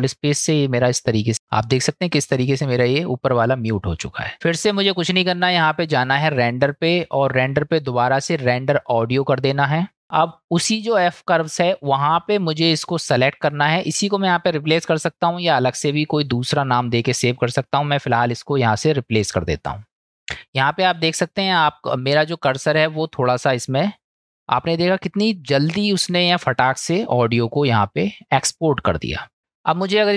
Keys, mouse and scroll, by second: 0.0 ctrl+space, 1.3 click, 3.3 click, 6.3-10.0 drag.